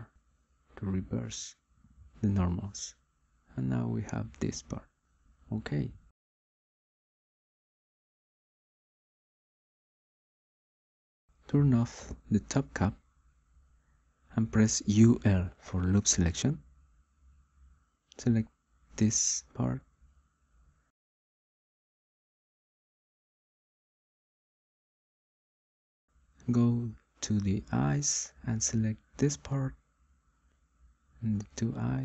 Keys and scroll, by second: 0.9 r, 17.3 u, 17.6 l.